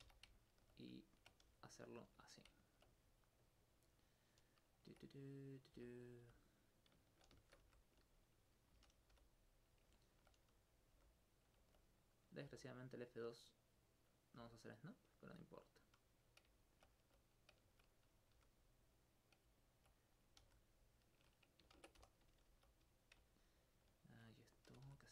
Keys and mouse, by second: 0.4 alt+click, 0.9 alt+right click, 1.9 click, 2.7 alt+click, 3.3 right click, 7.2 shift+right click, 7.7 shift+g, 8.4 click, 8.7 click, 9.0 click, 9.1 click, 9.5 click, 10.0 alt+click, 10.5 right click, 11.0 right click, 11.4 click, 11.9 right click, 12.9 right click, 13.9 click, 14.2 right click, 15.3 g, 15.8 click, 16.2 right click, 16.6 alt+click, 17.1 alt+f, 17.7 alt+click, 18.1 right click, 18.3 g, 19.4 click, 19.6 alt+click, 20.1 right click, 20.4 right click, 21.0 click, 21.8 ctrl+Tab, 22.0 ctrl+2, 22.2 right click, 23.2 alt+click, 24.0 alt+click, 24.5 right click, 24.7 right click, 24.9 right click.